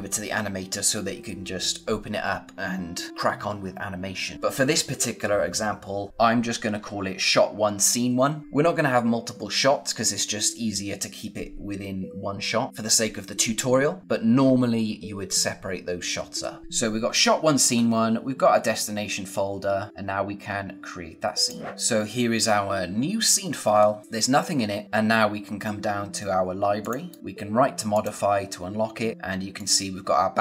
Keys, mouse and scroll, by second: 21.3 click, 23.3-23.7 scroll down 1, 23.7-24.1 scroll up 1, 24.8-26.2 scroll down 1, 26.7 click, 27.0 right click, 27.8 click, 29.5 click.